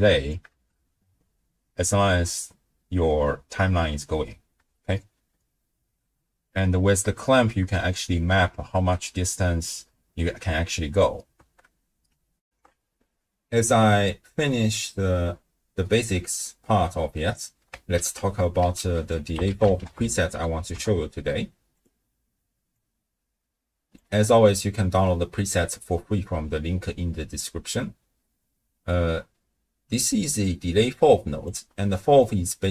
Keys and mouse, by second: 0.5 shift+space, 4.1 space, 4.7 shift+space, 7.9 space, 10.3 space, 11.4 shift+space, 12.4 ctrl+alt+shift+w, 12.6 ctrl+alt+shift+q, 17.9 ctrl+a, 20.1 l, 22.8-24.1 drag, 25.1 middle click, 30.4-31.5 drag, 31.8 middle click, 32.4-32.7 d.